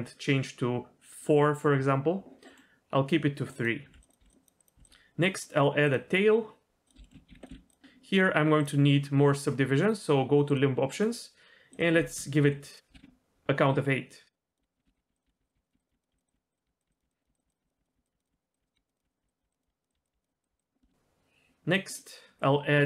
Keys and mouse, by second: 3.6 click, 3.8 g, 4.2 g, 4.6 click, 4.7 g, 5.8-6.9 drag, 7.0 shift+middle click, 7.3 g, 7.5 s, 8.6 click, 10.5-14.3 drag, 14.5 click, 14.6-20.5 typing, 18.5 click, 18.7 click, 18.9 click, 19.6 click, 19.9 click, 20.4 click, 20.8 shift+middle click, 22.0-22.8 drag.